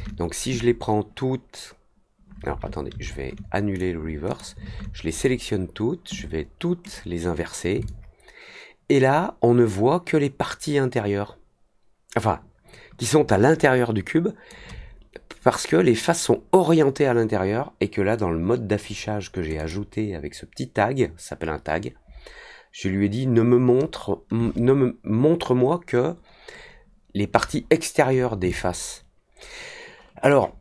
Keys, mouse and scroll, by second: 4.2 click, 6.8 click, 7.8-14.4 alt+drag, 19.5 click, 28.4-30.2 alt+drag.